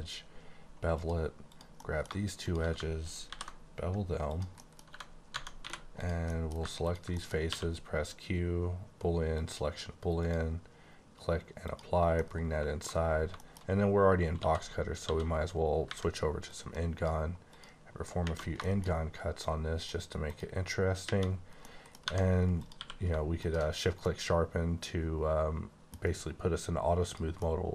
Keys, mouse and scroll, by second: 0.1-1.0 scroll up 10, 1.0 click, 1.5 click, 1.8 middle click, 2.4 shift+click, 3.2 b, 4.3 click, 4.5 middle click, 4.9 Tab, 5.3 Tab, 5.6 typing, 5.9 click, 6.2 middle click, 6.8 ctrl+click, 7.1 middle click, 7.4 scroll up 2, 7.5 q, 9.3 click, 10.2 click, 11.7 click, 12.0 scroll down 1, 12.1 middle click, 13.0-13.7 scroll up 3, 13.3 shift+middle click, 14.3-15.0 typing, 16.4 click, 17.5 click, 18.2 space, 18.6 shift+middle click, 18.7-19.4 shift+scroll down 2, 19.4 click, 20.3 click, 21.0 space, 21.4 scroll down 3, 21.6 middle click, 21.8 scroll up 1, 22.0 1, 22.5 click, 22.8 q, 23.3 click, 24.0 middle click.